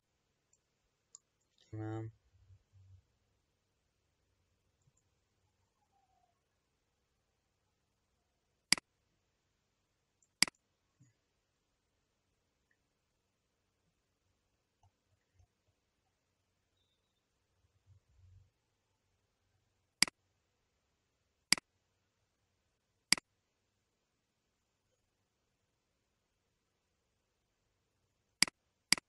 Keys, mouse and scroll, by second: 1.2 KP_7, 2.8-3.4 scroll down 1, 3.4-4.0 scroll up 6, 4.9 KP_0, 6.2-7.2 scroll up 9, 8.7 click, 10.4 click, 13.6 scroll up 2, 14.2-15.1 scroll down 25, 15.7 scroll down 17, 16.1-18.9 scroll up 49, 20.0 click, 21.4 click, 23.1 click, 28.3 click, 28.8 click.